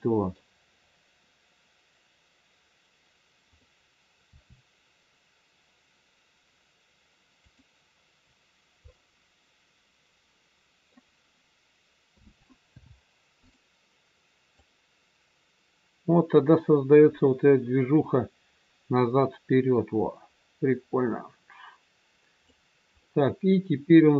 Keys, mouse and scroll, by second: 3.6 click, 4.2 r, 8.8 middle click, 12.1 a, 12.6 i, 14.5 click, 22.9 middle click.